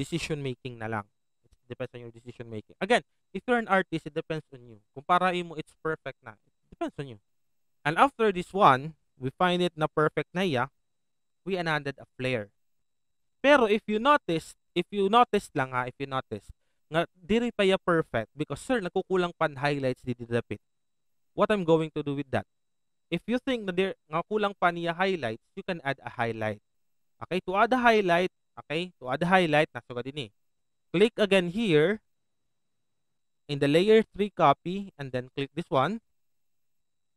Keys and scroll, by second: 15.3 alt+space, 21.4 ctrl+z, 27.5 ctrl+alt+z, 28.3 ctrl+z.